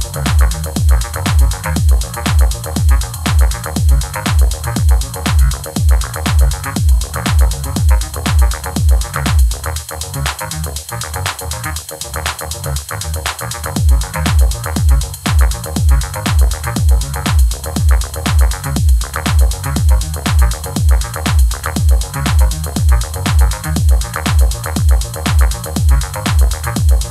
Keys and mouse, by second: 0.0-1.3 typing, 0.3 KP_Enter, 1.3 KP_Enter, 1.7 Tab, 1.9 Tab, 1.9 ctrl+a, 2.7 Tab, 2.7 ctrl+a, 3.0-7.6 typing, 3.1 click, 3.5 click, 4.8 Tab, 5.6 Tab, 5.7 click, 7.9 Tab, 8.0 ctrl+2, 8.6 ctrl+s, 8.7 /, 9.3 ctrl+s, 9.8 ctrl+s, 10.2 Tab, 10.5 ctrl+a, 10.7 ctrl+a, 11.0 ctrl+a, 11.2-21.5 typing, 11.5 Tab, 12.5 click, 14.9 Tab, 14.9 ctrl+r, 15.3 right click, 15.5 Tab, 15.6 Tab, 15.6 ctrl+1, 15.8 Tab, 15.9 ctrl+a, 15.9 Tab, 16.1 click, 17.2 Tab, 17.3 Tab, 19.3 Tab, 19.4 ctrl+1, 19.6 ctrl+2, 21.2 right click, 21.4 Tab, 22.6-25.0 typing, 24.8 click, 25.0 Tab, 25.5 ctrl+s, 26.4 Tab, 26.6-27.1 typing.